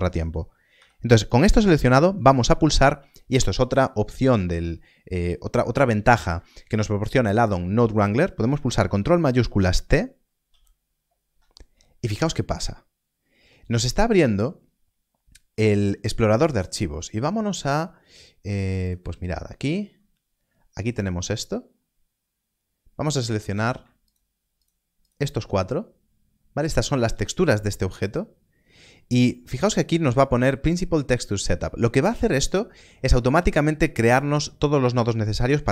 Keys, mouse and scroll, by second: 0.7 x, 1.2 click, 8.4 click, 8.8 ctrl+s, 10.4 ctrl+shift+t, 23.4 click, 24.0 shift+click.